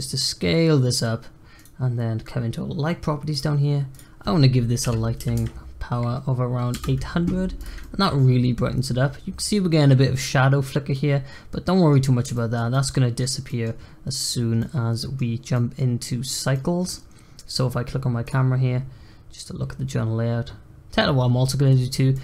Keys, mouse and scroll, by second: 3.2 click, 3.8-5.3 drag, 5.3 0, 7.5 click, 7.7 middle click, 8.3 scroll up 2, 10.8-12.0 middle drag, 12.0-12.3 scroll up 2, 12.3-14.3 shift+middle drag, 14.3 scroll down 2, 14.5-18.1 middle drag, 18.1 click, 18.6-19.5 scroll up 4, 19.6 scroll down 1, 19.8-20.4 scroll up 2, 20.6 scroll down 1, 22.1 click.